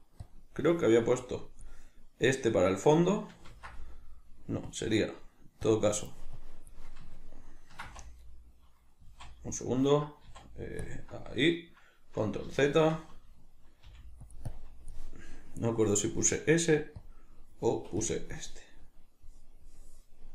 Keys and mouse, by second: 3.5 ctrl+z, 7.2-14.4 ctrl+middle drag, 7.8 z, 14.4 click.